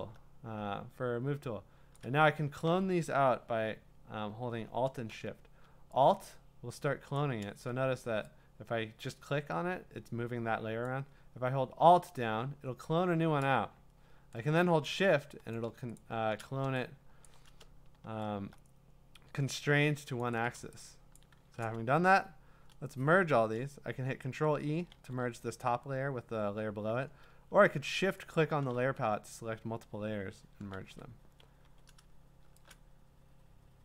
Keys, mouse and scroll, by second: 1.9 shift+click, 7.1 alt+click, 7.4 ctrl+z, 10.8 click, 15.5 click, 16.0 click, 17.2 click, 17.3 click, 20.2 shift+click, 21.2 click, 21.8-24.2 scroll, 24.9 ctrl+e, 28.3 shift+click, 29.5-30.7 scroll, 30.7 ctrl+e, 31.6 v.